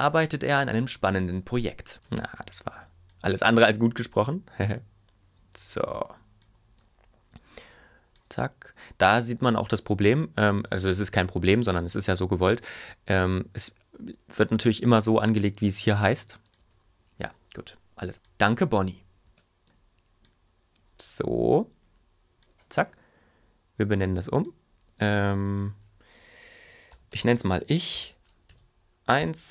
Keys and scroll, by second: 1.9 space, 16.6 space, 19.2 space, 26.6-28.5 typing, 29.2 Return.